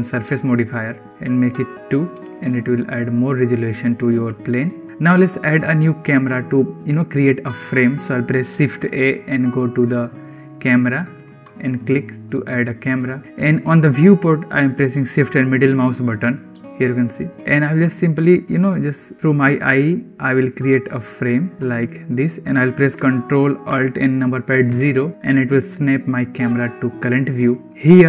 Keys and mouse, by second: 1.6 click, 2.2-3.1 middle drag, 4.2-4.7 shift+middle drag, 8.4 shift+a, 13.0-16.1 shift+middle drag, 16.1-16.5 shift+drag, 17.4 shift+middle click, 18.1 middle click, 18.7-19.3 shift+middle drag, 19.8-20.4 shift+middle drag, 21.2-22.1 shift+middle drag, 24.6 ctrl+alt+KP_0.